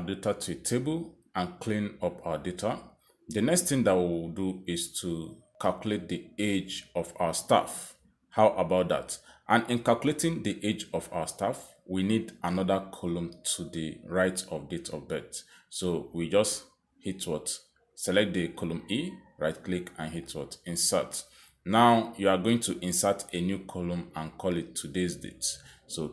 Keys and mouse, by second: 15.3 click, 16.0 click, 18.9 right click, 18.9 click, 20.7 click, 24.5 click, 25.5 click.